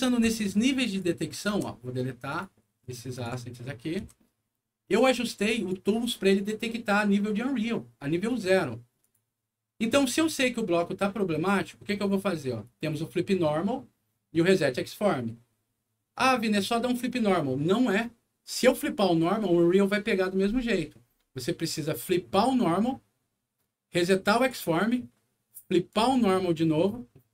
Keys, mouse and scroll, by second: 0.8 click, 1.4 Delete, 2.2 click, 3.1 shift+click, 3.9 Delete, 5.0 click, 5.5 click, 8.9 click, 22.2 click, 24.3 click, 25.8 click.